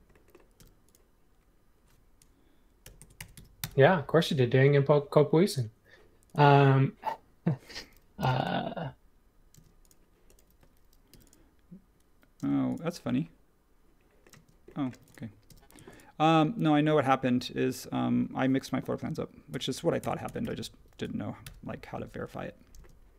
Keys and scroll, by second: 0.6 m, 2.6-4.6 typing, 8.2 m, 9.5 space, 11.1 m, 12.4 space, 14.3-15.4 typing, 19.5-20.9 typing, 21.4 Return.